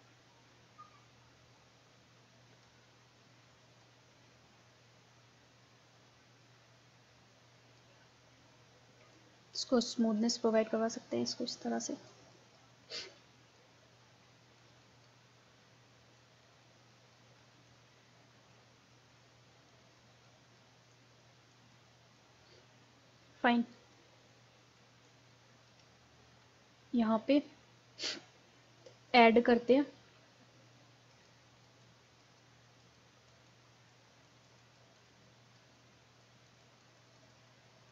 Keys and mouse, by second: 0.0-1.7 drag, 3.9-5.5 drag, 9.2-12.1 drag, 12.8-14.8 drag, 15.4-22.8 drag, 22.8 middle click, 22.9-25.9 drag, 25.9-27.2 middle drag, 31.0 middle click, 31.1-37.9 drag.